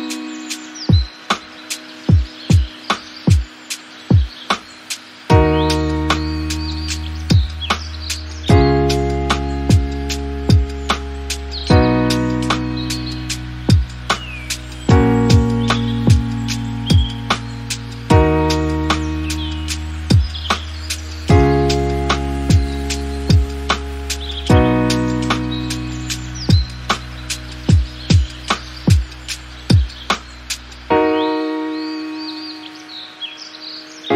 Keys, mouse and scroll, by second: 1.9 click, 2.1 scroll down 1, 2.2-3.3 middle drag, 3.3 click, 4.3 middle click, 4.8-5.2 scroll up 3, 5.2 click, 5.4 scroll down 1, 5.6-7.4 middle drag, 7.4-10.3 drag, 10.3 scroll down 1, 10.5 middle click, 11.0-11.5 scroll up 5, 11.5 click, 11.8-15.0 middle drag, 15.0-15.9 scroll down 3, 15.9 click, 16.5 KP_1, 17.0 scroll up 2, 17.2 shift+middle drag, 17.8 shift+middle click, 18.0-18.8 scroll up 2, 18.3 shift+middle drag, 19.0 Tab, 19.7 alt+z, 19.9-20.3 scroll up 3, 20.3 click, 20.8 g, 22.7 Tab, 22.9 alt+z, 23.9-24.8 scroll down 8, 24.0 middle click, 24.8-25.1 middle drag, 25.1 drag, 25.3-26.0 middle drag, 26.0 click, 26.4 KP_1, 26.9 shift+middle click, 27.0-27.4 scroll up 5, 27.4-28.1 shift+middle drag, 28.1 Tab, 28.6 alt+z, 29.0 click, 29.2-29.7 scroll up 1, 29.7 g, 31.5 alt+z, 32.2 Tab, 32.4 click, 32.5-33.3 scroll down 1, 33.3 click, 33.8 scroll up 2, 34.0-34.1 middle drag.